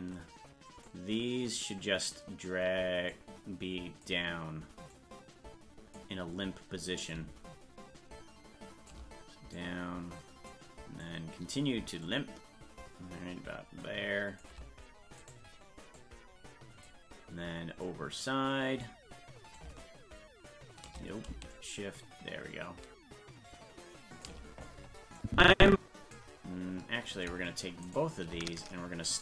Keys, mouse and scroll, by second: 0.8-2.1 drag, 3.1 click, 4.9-6.0 drag, 7.1-8.9 drag, 9.5 click, 11.0 click, 12.0-14.4 shift+drag, 15.3 right click, 16.0 click, 17.8-18.8 drag, 19.6-20.9 drag, 21.5-24.3 shift+drag, 25.2 click, 27.9 shift+right click, 29.1 right click.